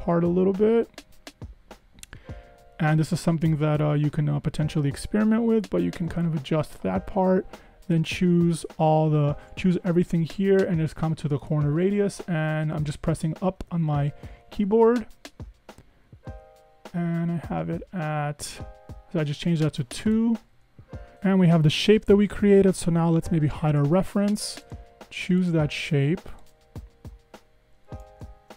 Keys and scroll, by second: 13.2 Up, 13.5 Up, 13.7 Up, 14.4 Down, 17.9 Up, 20.5 Escape, 20.6 Escape, 28.4 super+z.